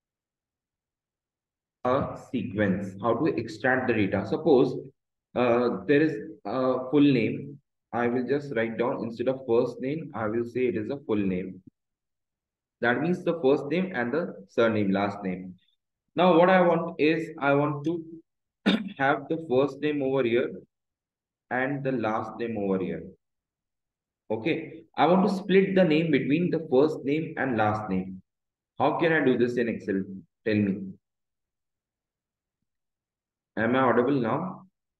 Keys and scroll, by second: 0.1 Escape, 4.3 Down, 6.8 Up, 8.8 Left, 10.8 BackSpace, 13.8 Return, 19.3 BackSpace, 21.3 Tab, 22.8 space, 24.3 Return, 26.3 Left, 28.3 Right, 29.3 Left.